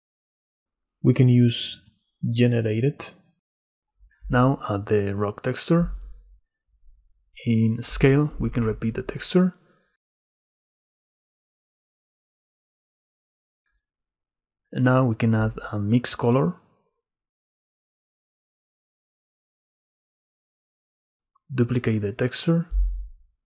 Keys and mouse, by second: 0.1 click, 1.5-2.7 drag, 4.2-5.6 drag, 6.8 click, 8.9-10.5 drag, 12.9 click, 13.8 click, 15.0 shift+a, 18.6 middle click, 19.5-20.7 drag, 21.8 click, 23.0 shift+d.